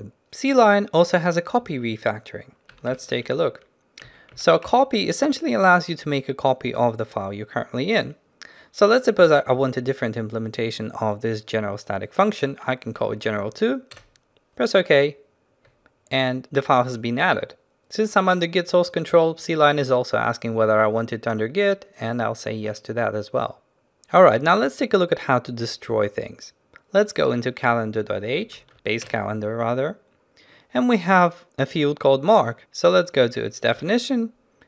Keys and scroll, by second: 3.0 ctrl+alt+shift+t, 3.8 ctrl+alt+shift+t, 28.7 ctrl+shift+n, 33.8 ctrl+b.